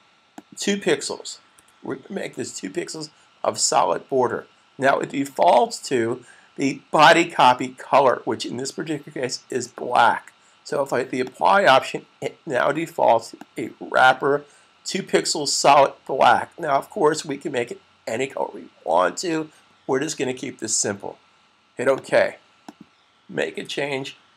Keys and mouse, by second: 1.2 click, 11.0 click, 21.8 click.